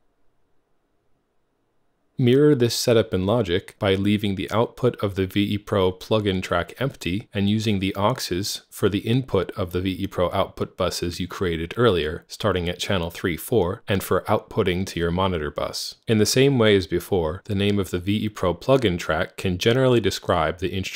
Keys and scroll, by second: 9.6-13.9 typing.